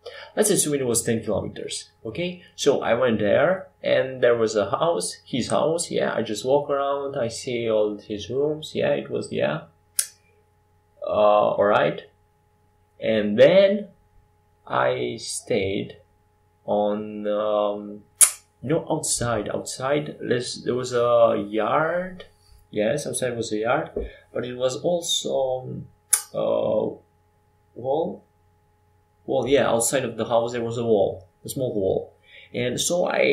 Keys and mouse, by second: 0.1-1.7 drag, 2.6 click, 3.2 s, 6.0 KP_5, 6.1 KP_7, 8.8 r, 11.3 r, 15.2 g, 23.0 r, 31.4-33.0 drag.